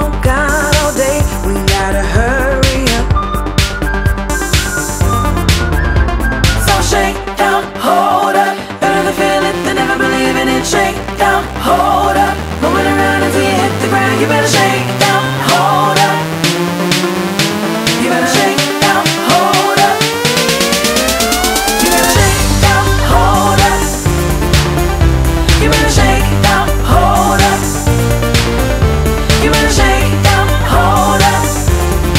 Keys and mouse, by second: 6.8 click, 7.7 click, 10.4 click, 13.2 click, 15.2 click, 17.4 click, 17.4 click, 19.7 click, 24.7 click, 27.0 click, 30.8 click, 31.8 click.